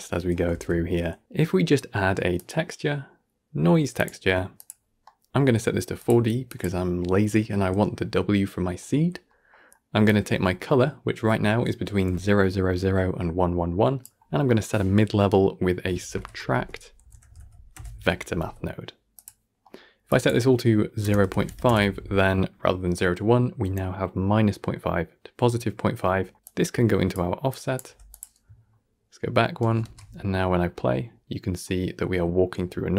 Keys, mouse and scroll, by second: 0.0 middle click, 0.4 shift+a, 4.9 middle click, 5.4-5.9 scroll up 2, 5.9-8.4 drag, 8.4-9.9 middle drag, 9.9-19.5 drag, 19.5 middle click, 20.0-25.9 drag, 25.9 middle click, 27.7 g, 28.6-29.3 alt+scroll up 1, 29.7 shift+space, 30.1 scroll up 1, 31.5-32.9 middle drag.